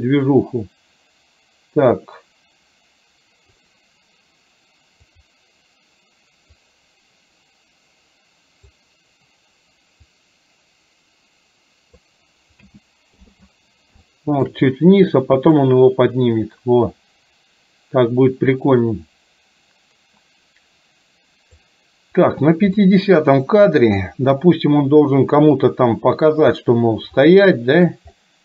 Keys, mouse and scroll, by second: 0.1-3.7 drag, 6.6-8.8 drag, 10.2-12.1 drag, 12.7 a, 13.3 i, 14.1 shift+middle click, 15.7-21.7 drag, 22.9-24.1 middle drag, 27.3-27.9 shift+middle drag, 28.3-28.4 middle drag.